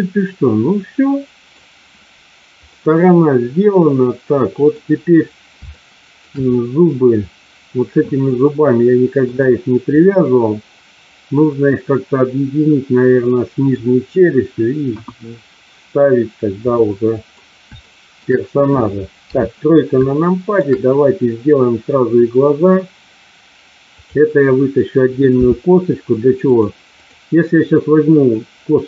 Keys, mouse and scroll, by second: 2.7-4.7 middle drag, 5.9 shift+middle click, 8.2 middle click, 10.0-13.7 middle drag, 14.9 KP_1, 16.7 middle click, 17.7 shift+middle click, 19.1 KP_3, 20.0 shift+middle click, 25.2 e, 26.5 click, 27.0 click.